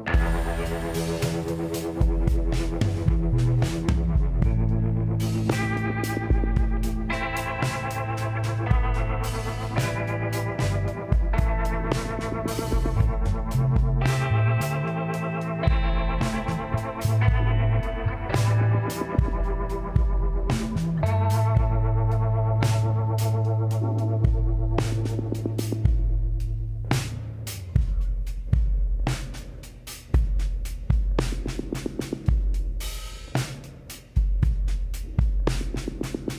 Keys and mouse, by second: 2.2-3.4 middle drag, 3.4 KP_Decimal, 3.5 middle click, 4.1 middle click, 5.7 click, 6.9 click, 11.5-14.7 middle drag, 11.9 a, 15.0 middle click, 16.1-18.2 middle drag, 18.2-20.7 drag, 19.7 w, 24.0 middle click, 24.1 a, 24.6 middle click, 24.7 click, 25.7 k, 30.0-32.4 drag, 30.4 a, 32.6 middle click, 33.9-35.0 middle drag, 36.2-36.3 middle drag.